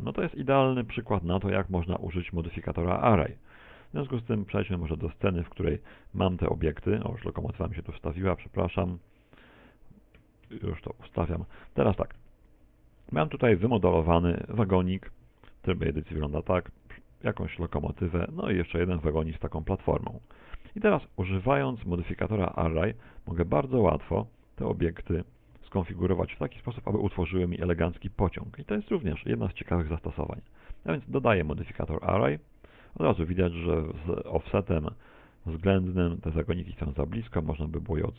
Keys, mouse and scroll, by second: 2.7 click, 5.1 click, 12.2 2, 13.0-13.5 scroll up 4, 13.5 shift+middle click, 13.9 middle click, 14.7 right click, 15.1 Tab, 15.9 Tab, 15.9-16.3 scroll up 1, 16.3-16.9 scroll down 2, 16.9 right click, 17.3-17.8 scroll down 1, 17.8 shift+middle click, 17.8 scroll down 1, 18.4 right click, 18.7 middle click, 21.4 middle click, 22.1 shift+middle click, 23.5 shift+right click, 24.9 click, 26.0-26.4 scroll down 3, 26.4 shift+middle click, 27.9 right click, 30.6 click, 33.1-33.6 scroll up 1, 33.6-34.7 scroll down 1, 36.0 click.